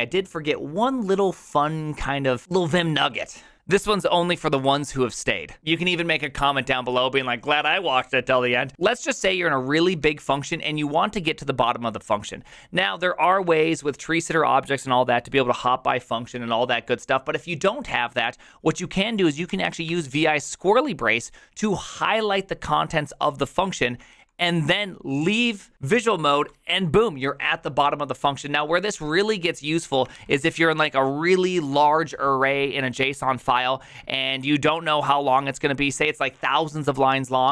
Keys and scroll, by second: 9.0 ctrl+u, 9.1-10.4 typing, 19.3-20.4 typing, 24.1 ctrl+c, 26.4 j, 30.2 ctrl+t, 34.0 k, 34.7 k, 34.7-35.6 k.